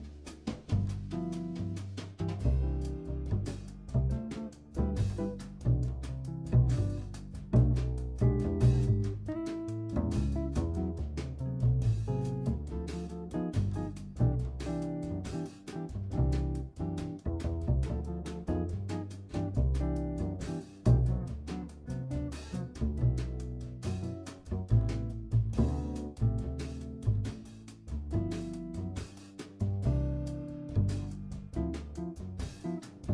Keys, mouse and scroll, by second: 0.8 r, 4.2-6.0 middle drag, 6.0 click, 7.0 r, 10.4 click, 11.3 r, 15.6 click, 16.5 r, 21.3-25.1 middle drag, 25.1-25.5 scroll down 1, 25.5-27.2 middle drag, 27.2 ctrl+z, 27.8 ctrl+z, 28.3 ctrl+z, 29.6 r.